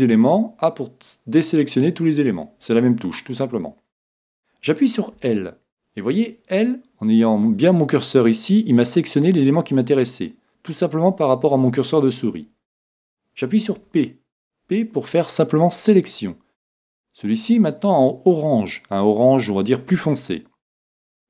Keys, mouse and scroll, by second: 5.2 l, 13.8 p, 16.8-18.7 middle drag.